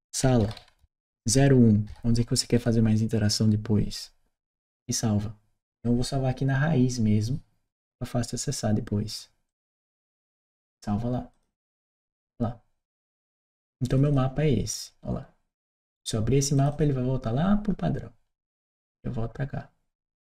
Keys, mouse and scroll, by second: 0.2 shift+s, 2.4 1, 9.3 click, 11.1 click, 13.7 click, 13.9 click, 16.4 click, 18.5 click, 18.6 click, 19.8 right click.